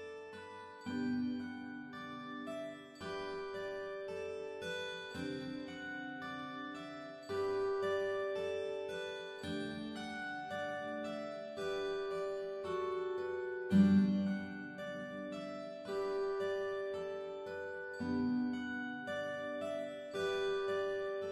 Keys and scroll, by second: 3.2 space, 5.3 space, 7.8 space, 10.0 x, 16.4 space, 19.6 space.